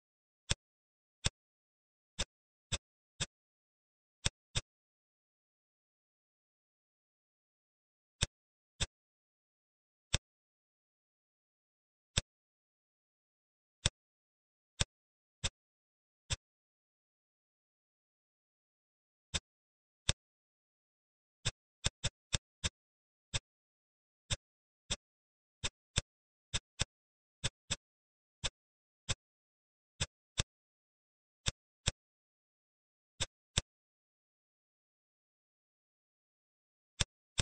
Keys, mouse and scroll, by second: 0.3 shift+click, 1.1 shift+click, 2.0 ctrl+click, 2.6 ctrl+click, 3.1 middle click, 4.0 shift+click, 4.4-5.9 middle drag, 6.0 e, 8.6 click, 9.9-11.4 middle drag, 11.9 click, 13.7 middle click, 14.6 shift+click, 15.2 middle click, 16.1 shift+click, 18.7 ctrl+z, 19.2 middle click, 19.9 shift+click, 21.3 shift+click, 22.1 shift+click, 22.5 middle click, 23.2 shift+click, 24.1 middle click, 24.7 shift+click, 25.0 middle click, 25.5 shift+click, 25.8 middle click, 26.4 shift+click, 26.6 middle click, 27.3 shift+click, 27.5 middle click, 28.2 shift+click, 28.9 middle click, 30.2-31.3 drag, 31.7-32.8 middle drag, 32.8 Tab, 33.0 click, 33.3-34.9 middle drag, 35.5-36.5 scroll up 5, 36.5-36.8 scroll up 2, 36.8-37.2 middle drag, 37.2 click.